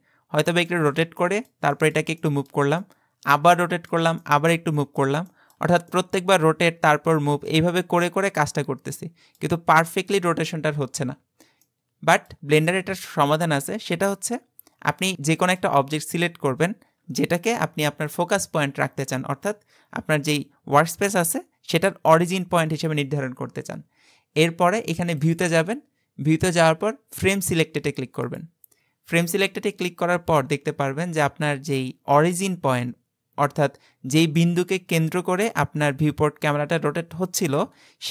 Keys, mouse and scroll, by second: 1.2-11.1 shift+middle drag, 11.1-11.7 scroll down 2, 11.7-13.0 shift+middle drag, 13.0-13.9 scroll up 1, 13.9 scroll up 1, 14.1-17.0 shift+middle drag, 25.2-28.4 drag, 31.5-34.5 middle drag.